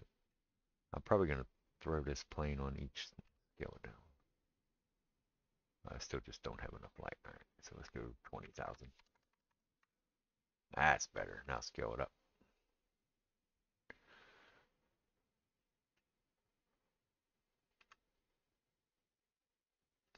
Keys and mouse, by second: 3.3 s, 5.0-7.5 middle drag, 7.5-14.0 drag, 9.0 KP_0, 9.3 KP_0, 11.4 s, 14.0-17.5 middle drag, 17.5-19.1 drag, 17.8 s, 19.1-20.1 middle drag.